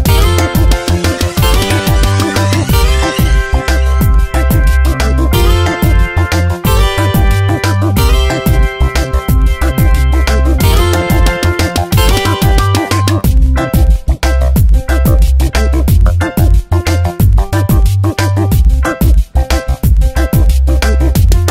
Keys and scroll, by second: 3.9 v, 5.1 ctrl+BackSpace, 7.2 v, 10.8 ctrl+shift+], 14.3 ctrl+t, 16.0 Return, 18.5 space, 19.0 v, 19.3 Tab.